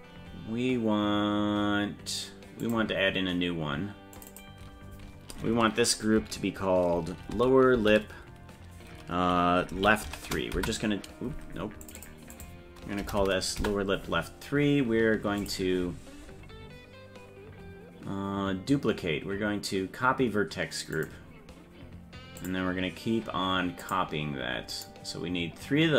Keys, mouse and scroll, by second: 2.6 click, 4.1-11.3 drag, 11.8 click, 12.0-14.1 drag, 15.4-21.1 drag, 22.4-23.9 drag, 24.7-25.9 drag.